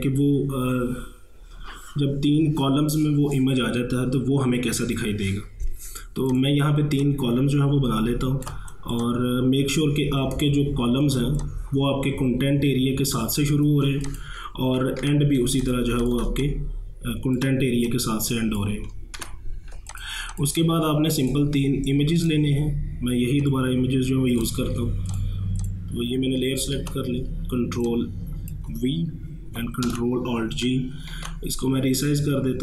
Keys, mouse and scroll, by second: 6.3-11.1 drag, 11.1 ctrl+space, 11.4 ctrl+click, 11.6 ctrl+space, 13.6 ctrl+space, 14.1 click, 14.4 space, 15.0 ctrl+1, 15.5 space, 15.6 click, 16.0 space, 16.0 click, 16.1 space, 16.4 ctrl+click, 16.8 ctrl+space, 17.9-19.2 drag, 19.2 ctrl+1, 19.8 space, 20.0 click, 20.3 space, 21.3 click, 22.2 right click, 23.4 click, 24.4 right click, 25.1 click, 26.8 ctrl+v, 27.9-29.9 drag, 29.9 ctrl+alt+g, 31.1 ctrl+t.